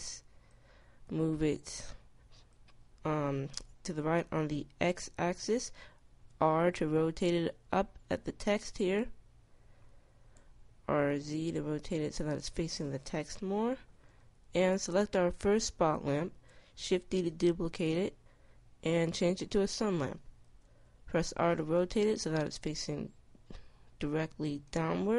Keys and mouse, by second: 0.5 click, 0.9 click, 1.5 click, 5.7 r, 10.6 r, 12.6 KP_0, 16.4 shift+d, 20.1 r.